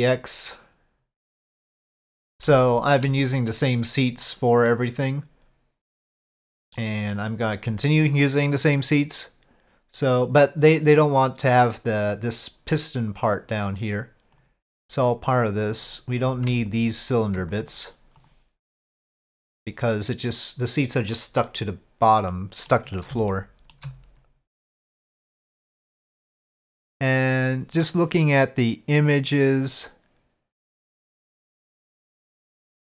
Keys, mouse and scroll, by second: 0.6 middle click, 1.3 click, 1.9 middle drag, 2.6-3.0 shift+middle drag, 3.2-3.6 middle drag, 4.2-4.7 middle drag, 6.7 middle click, 15.8 click, 16.7 ctrl+click, 17.1 ctrl+click, 17.5 click, 22.3 middle click, 23.3-23.7 shift+middle drag.